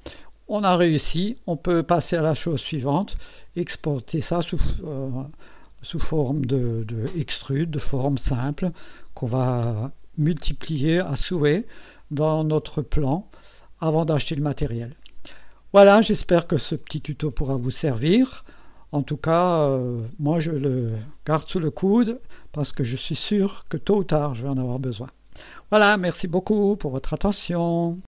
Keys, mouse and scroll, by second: 1.9-2.4 scroll down 2, 3.7 click, 12.2-15.4 drag, 16.9 middle click, 17.7-20.7 drag.